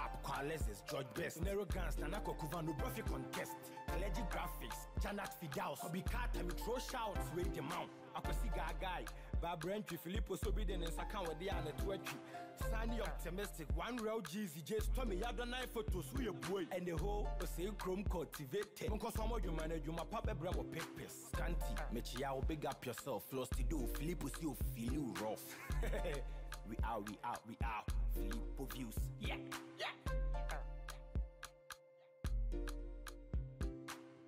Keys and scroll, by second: 15.8 ctrl+j.